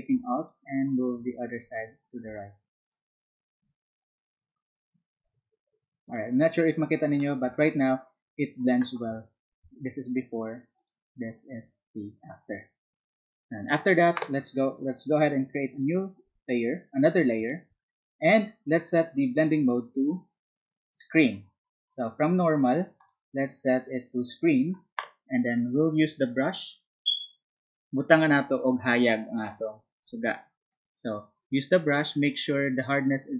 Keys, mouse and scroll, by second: 0.4-2.2 alt+drag, 3.6-6.0 alt+drag, 7.2 alt+click, 9.8 alt+click, 10.8 alt+click, 15.7 alt+click, 19.3 alt+click, 21.9 alt+click, 23.0 alt+click, 24.2 alt+click, 27.2 alt+click, 32.0 alt+right click, 32.9 alt+click.